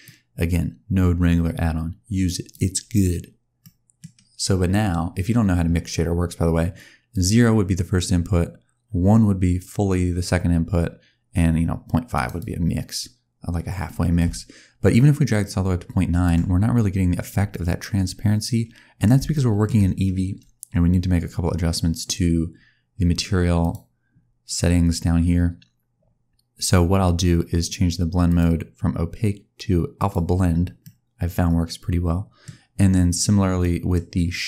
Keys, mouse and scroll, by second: 3.5 middle click, 7.0 click, 14.0 click, 17.4 middle click, 19.2 shift+middle click, 23.5 click, 28.1 click, 30.7 middle click, 33.5 middle click.